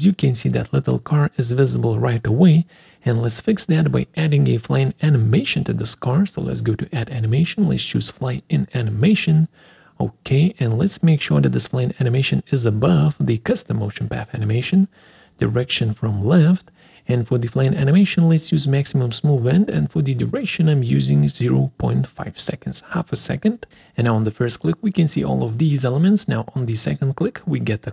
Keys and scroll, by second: 4.2 Escape.